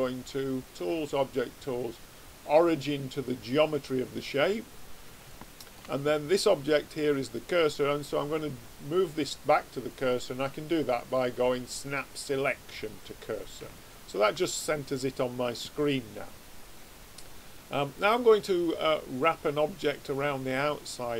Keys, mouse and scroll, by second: 5.2-7.7 middle drag, 9.8 click, 13.7-21.1 middle drag.